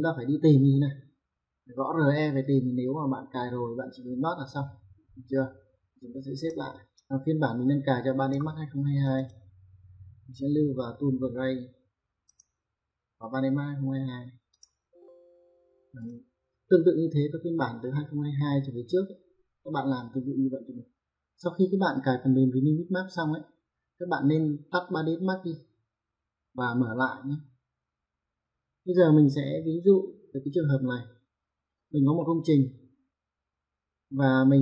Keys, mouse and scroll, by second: 6.2 click, 8.8 click, 12.1 click, 14.3 click, 15.8 click.